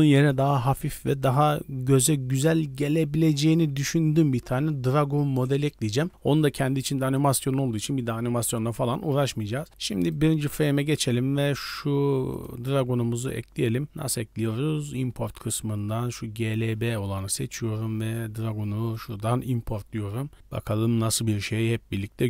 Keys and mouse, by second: 12.2-16.7 drag.